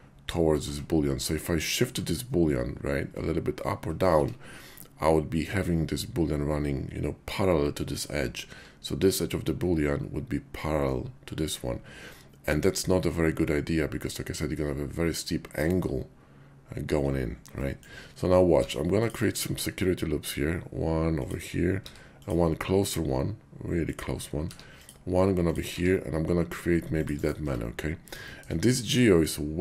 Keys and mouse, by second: 0.6 Tab, 1.8 q, 4.1 Tab, 17.6 middle click, 18.5 ctrl+r, 21.1 click, 21.8 ctrl+r, 23.7 click, 24.4 ctrl+r, 25.5 click, 25.9 ctrl+r, 27.2 click, 27.4 Tab, 28.2 shift+click, 28.8 click.